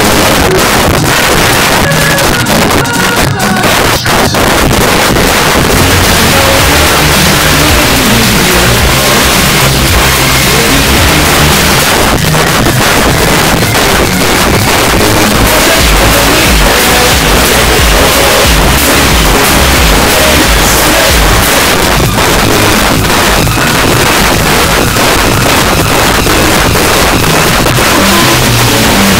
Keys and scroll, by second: 1.2 s, 1.3 Up, 1.4 Up, 1.5 Up, 1.7 Up, 2.0 Up, 2.1 Up, 2.3 Return, 11.9 Page_Down, 21.6 Page_Down.